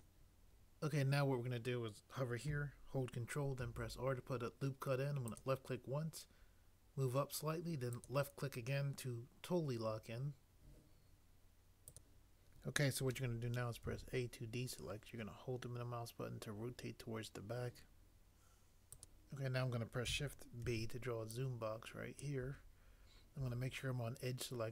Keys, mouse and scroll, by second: 3.6 ctrl+r, 13.9 a, 20.6 b.